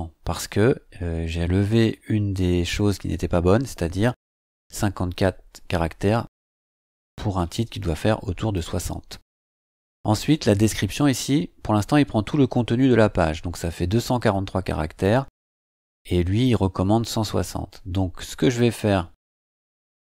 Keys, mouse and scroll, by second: 7.3-8.7 drag, 13.1-13.4 scroll down 2, 14.1-15.2 drag, 15.6 click, 18.3-18.7 drag, 19.4-20.1 scroll down 6.